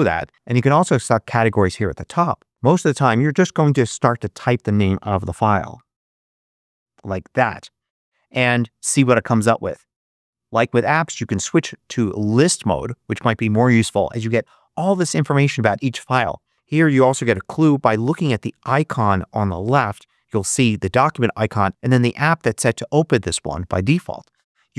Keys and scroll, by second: 5.3-6.4 typing.